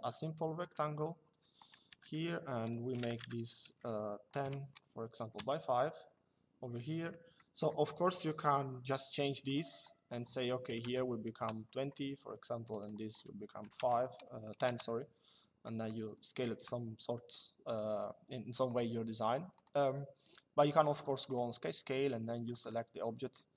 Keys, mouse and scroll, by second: 1.6 Tab, 2.9 Tab, 4.1 KP_5, 7.1 middle click, 9.2 click, 10.4 KP_2, 11.1 KP_Enter, 12.4 click, 13.4 KP_1, 15.4 middle click, 19.2 click, 21.0 click, 22.2 click.